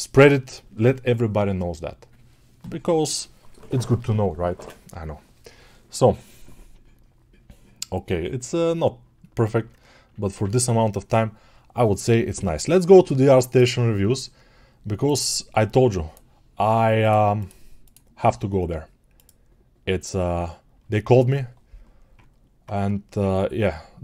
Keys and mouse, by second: 10.4 ctrl+s.